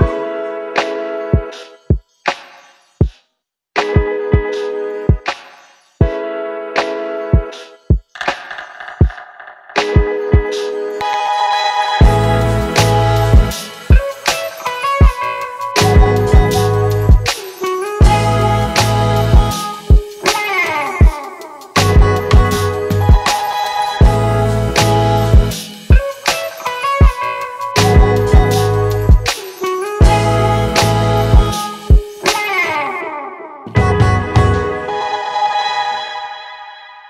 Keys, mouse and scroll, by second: 3.8-4.4 scroll down 1.